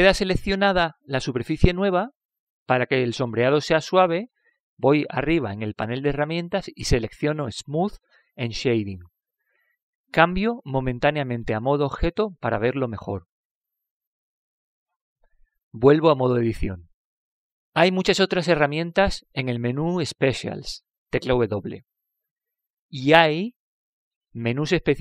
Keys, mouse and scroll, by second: 9.0-10.8 drag, 13.2 Tab, 14.0-16.0 middle drag, 17.9 Tab, 18.5-20.9 middle drag.